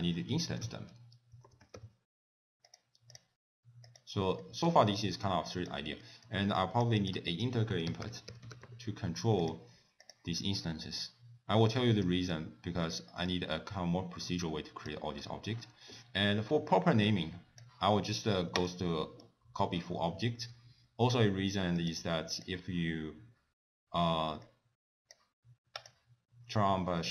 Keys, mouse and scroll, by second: 4.0 click, 4.5 middle click, 4.8-5.3 scroll up 2, 5.3 click, 6.1 middle click, 6.6 click, 7.0 click, 7.4 ctrl+a, 11.1 click, 12.4 click, 13.4 click, 17.1 click, 18.6 click, 19.3 click, 21.9 click, 22.4 click, 24.6 click, 25.9 click.